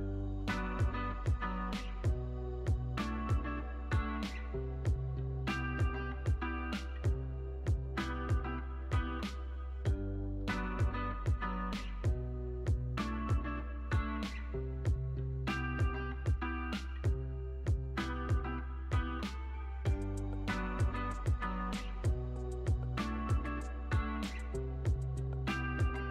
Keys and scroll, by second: 0.4 space, 12.5 alt+x, 18.2 p, 18.9 shift+s, 20.8 z, 25.4 x.